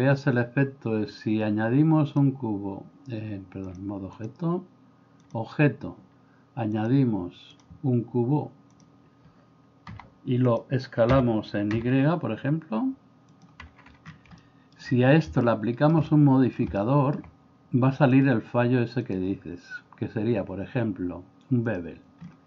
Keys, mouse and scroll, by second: 2.1-3.2 drag, 3.8 click, 5.3-8.8 drag, 9.9 g, 11.2 s, 14.5 middle click, 15.4-15.9 middle drag, 16.1-16.6 middle drag, 16.9 shift+middle click, 19.1-21.8 drag.